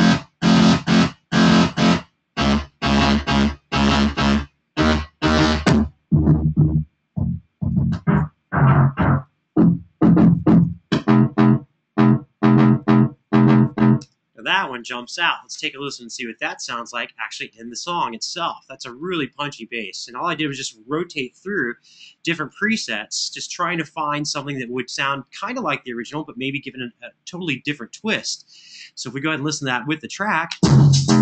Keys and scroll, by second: 13.8 space, 23.3 super+=, 30.2 space.